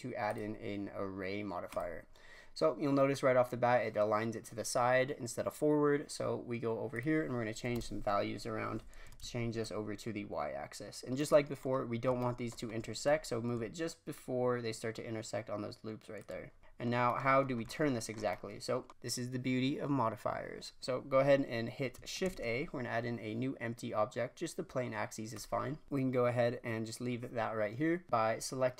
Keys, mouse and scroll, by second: 1.7-2.2 drag, 2.2-3.3 scroll down 2, 3.3 scroll down 1, 6.9-11.6 drag, 11.6-12.5 middle drag, 12.5-14.1 shift+scroll up 4, 14.1-16.6 shift+drag, 16.6 scroll down 4, 17.4 scroll up 1, 17.6-21.3 shift+middle drag, 22.2 shift+a, 28.0 click.